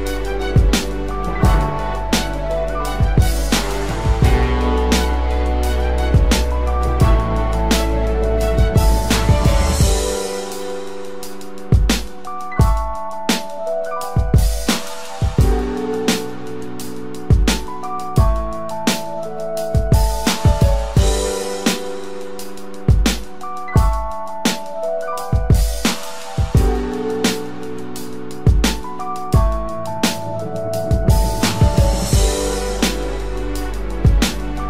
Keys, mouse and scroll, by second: 7.0 Right, 19.3 double click, 27.2 double click, 28.3 right click, 28.9 double click.